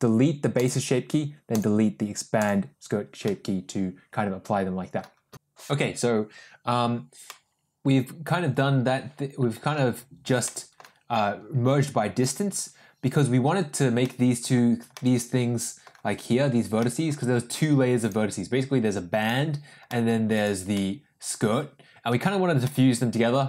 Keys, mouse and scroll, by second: 0.4-0.7 drag, 1.4 click, 2.3 drag, 3.1-4.9 middle drag.